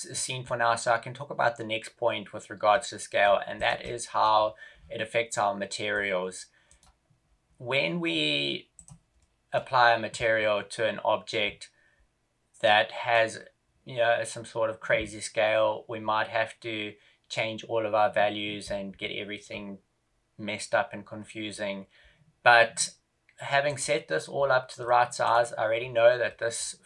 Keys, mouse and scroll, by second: 3.7 middle click, 4.2-5.2 scroll down 7, 5.2 middle click, 5.2-6.6 scroll down 6, 6.6 right click, 7.4-7.8 scroll up 2, 8.7 click, 9.1 middle click, 12.6 middle click, 13.8 scroll up 2, 14.4 scroll up 1, 21.5 scroll down 3, 23.8 right click, 24.4 scroll down 2, 24.7 middle click, 25.2 right click, 25.7 scroll down 2, 26.3 middle click.